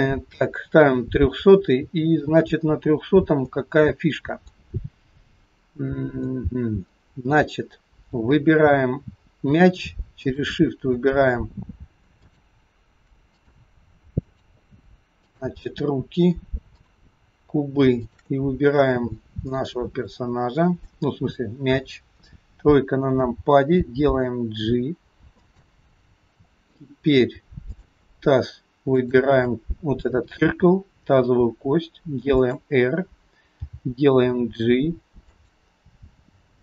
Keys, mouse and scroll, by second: 2.1-2.8 scroll up 3, 3.5 middle click, 3.5 scroll up 1, 6.3 middle click, 10.2 shift+click, 13.3 click, 14.3 click, 16.8 shift+click, 18.1 shift+click, 19.0-19.6 scroll down 3, 19.6 middle click, 22.2 KP_3, 23.8 g, 27.8 shift+click, 29.2 shift+click, 30.4 r, 33.7 g.